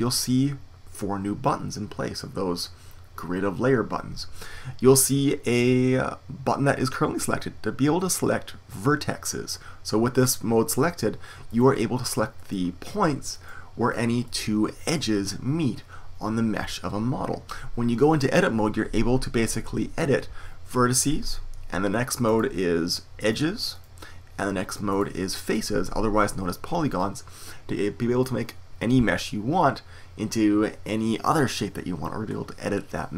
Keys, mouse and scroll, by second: 11.4-22.2 right drag, 22.2-33.1 drag, 23.2-33.1 right drag.